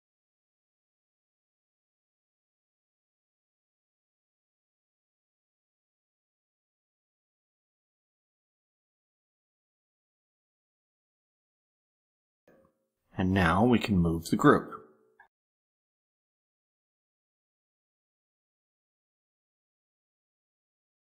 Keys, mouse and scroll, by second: 0.9 click, 2.0 click, 3.0 click, 3.5 click, 4.3 click, 5.1 click, 5.6 ctrl+scroll up 1, 5.9 ctrl+middle click, 6.0 click, 7.8-9.0 drag, 10.1 click, 11.4 click, 12.5-13.1 ctrl+scroll down 3, 13.4 ctrl+middle click, 14.7 click, 16.4 shift+click, 17.2 shift+click, 17.7 shift+click, 18.1 shift+click, 18.7 ctrl+shift+scroll up 3, 19.0 click, 19.1 ctrl+scroll down 2, 19.5 shift+click, 19.8 shift+click, 20.6 ctrl+shift+scroll down 3.